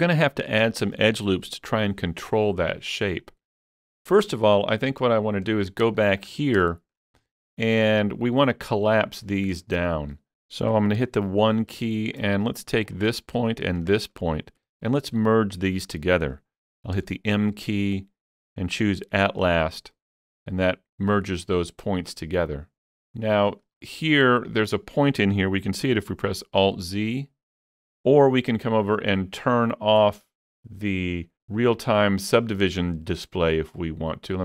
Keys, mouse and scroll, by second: 3.9 Tab, 3.9-4.3 scroll up 3, 4.3 middle click, 4.9 scroll down 3, 5.2 shift+middle click, 5.7 scroll up 3, 6.0 shift+middle click, 6.4 scroll down 1, 6.7-9.8 shift+middle drag, 7.5 shift+middle click, 9.4-9.7 scroll up 1, 11.0 1, 11.6 scroll up 1, 12.9 click, 14.4 scroll up 2, 15.1-17.0 shift+middle drag, 17.0 m, 19.4-21.3 shift+middle drag, 19.4-19.9 scroll up 1, 19.4 m, 19.9 click, 23.0 middle click, 23.0 click, 23.0 m, 23.5 shift+middle click, 26.7 shift+middle click, 26.7 click, 26.8 alt+z, 27.8 alt+z.